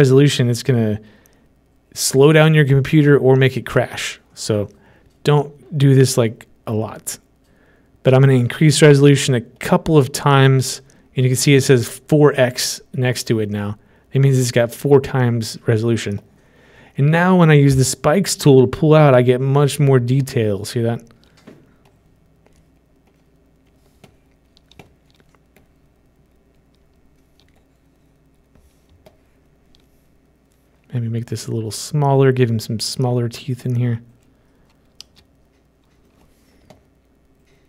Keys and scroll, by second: 35.6 ctrl+shift+z.